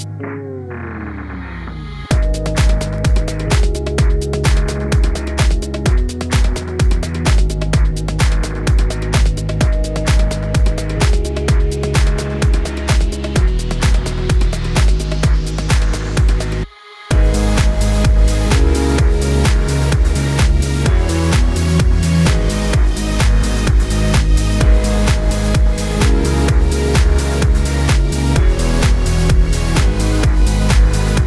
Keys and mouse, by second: 10.2 Tab, 10.8-14.4 middle drag, 14.4 click, 14.8 Tab, 14.8-17.3 middle drag, 16.8 shift+d, 17.3-21.3 drag, 20.9 s, 21.3 middle click, 21.9-25.7 drag, 24.2 s, 25.7-29.7 middle drag, 29.7-31.2 drag.